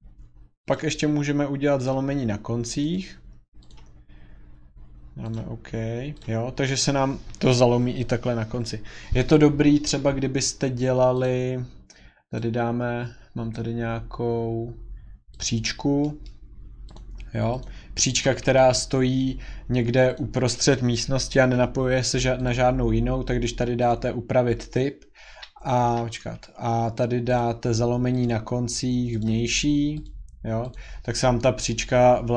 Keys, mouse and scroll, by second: 0.7 click, 1.9 click, 2.9 click, 3.7 click, 4.4-5.0 scroll, 5.3 click, 5.7-6.0 scroll, 6.2 click, 6.6 scroll, 11.2 click, 12.4 click, 13.5-14.4 scroll, 15.4 click, 15.6-16.3 scroll, 16.5-16.9 scroll, 16.9 click, 17.6 click, 18.0 scroll, 18.1 scroll down 8, 18.1 scroll down 1, 18.3 Escape, 18.4 Escape, 18.7 Escape, 20.1 click, 20.9-21.3 scroll, 22.5 click, 23.9 click, 25.3 Escape, 25.8 Escape, 27.4 click, 28.2 click, 29.3 click, 30.0 click, 30.7 click.